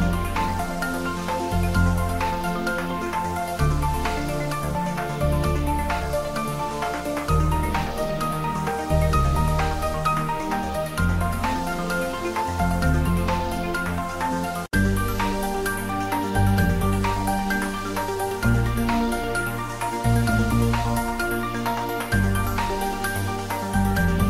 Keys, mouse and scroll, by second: 0.0-3.7 typing, 1.6 click, 2.7 click, 4.7 click, 5.1 ctrl+s, 5.5-8.0 middle drag, 8.3 click, 9.5 shift+z, 10.0 click, 10.4 shift+click, 12.2 g, 12.7 click, 12.8 ctrl+z, 13.4 shift+click, 15.1 g, 17.8 click, 18.2 r, 18.7 click, 19.5 ctrl+s, 21.7 shift+z, 22.1 shift+click, 22.5-24.2 ctrl+middle drag.